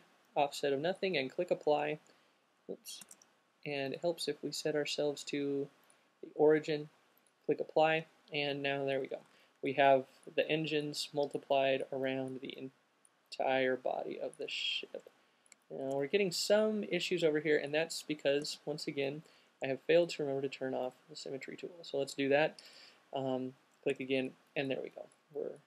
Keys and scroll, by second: 3.3 super+z, 18.6 alt+shift+super+z.